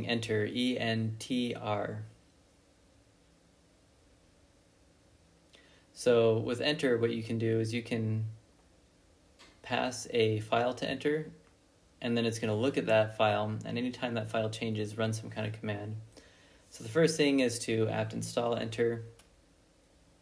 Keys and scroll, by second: 11.7 ctrl+l, 12.4-13.2 typing, 14.8 Return, 19.3 ctrl+b, 19.5 c.